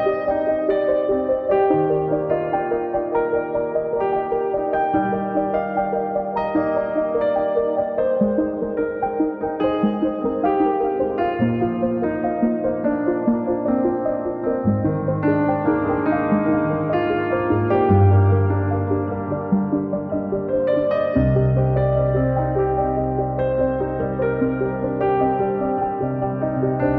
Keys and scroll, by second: 0.0 m, 1.2 Up, 3.9 space, 7.2 Return, 11.0 Delete, 12.9 space, 13.0 Escape, 17.7 r, 22.9 space, 24.2 m, 24.7 Right, 24.9 Left, 25.6 space.